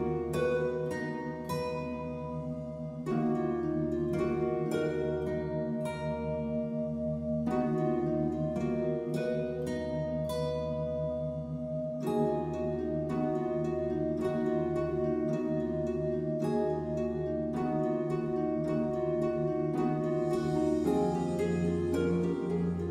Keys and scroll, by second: 4.7 ctrl+e.